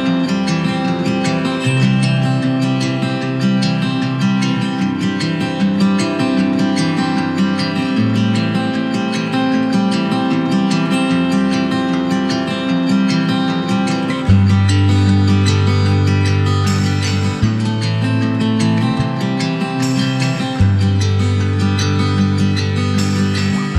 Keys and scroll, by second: 9.9 super+c, 10.6 super+f.